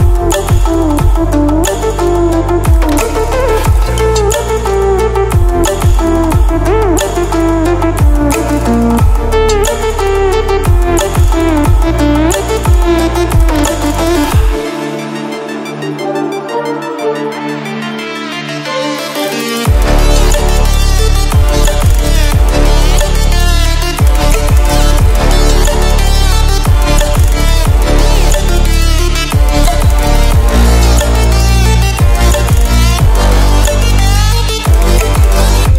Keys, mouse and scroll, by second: 2.7 ctrl+w, 5.3 ctrl+w, 7.8-9.4 drag, 15.0 scroll up 1, 16.2-22.7 drag, 22.6 click.